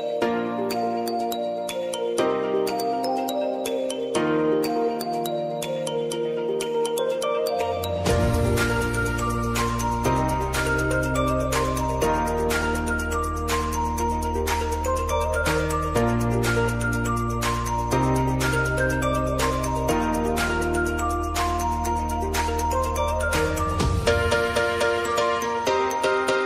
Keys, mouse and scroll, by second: 0.4 click, 0.9 space, 3.1 space, 5.1 space, 5.8 click, 7.5-8.6 typing, 12.5 typing, 12.9 ctrl+n, 14.1-15.0 typing, 16.7 ctrl+k, 18.2 click, 19.4 Return, 20.8-26.4 drag.